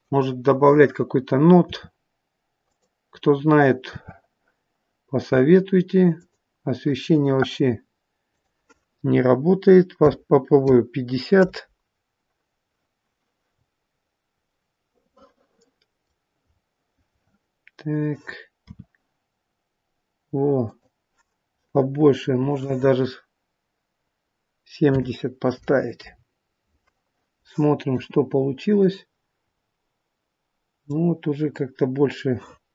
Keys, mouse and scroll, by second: 1.6 r, 3.8 r, 8.2 click, 13.4-13.9 scroll up 6, 14.4 middle click, 16.3-16.7 scroll up 2, 18.6 r, 22.4 click, 27.9 KP_0, 29.5 scroll down 2.